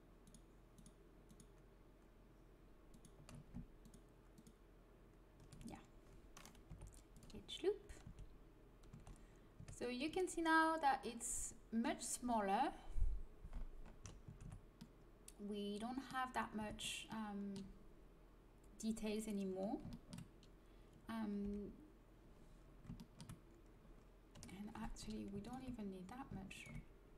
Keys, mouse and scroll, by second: 6.6 Delete, 8.0 a, 8.9 a, 9.5 Tab, 10.0 Tab, 14.2 a, 14.4 Tab, 16.5 Tab, 21.4 l, 24.3 KP_1, 25.0 a.